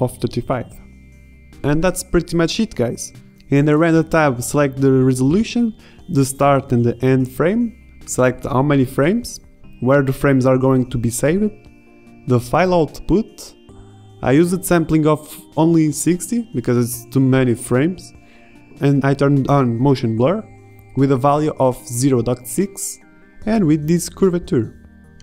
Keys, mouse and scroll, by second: 1.0 KP_0, 2.0 g, 4.9 s, 7.7-10.0 drag.